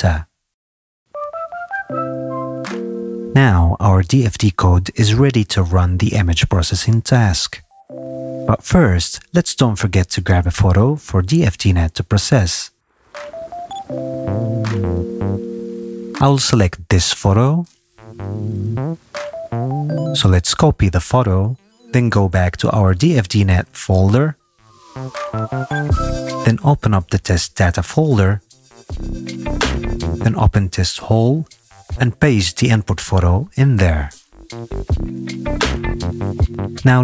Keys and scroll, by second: 0.6 Return.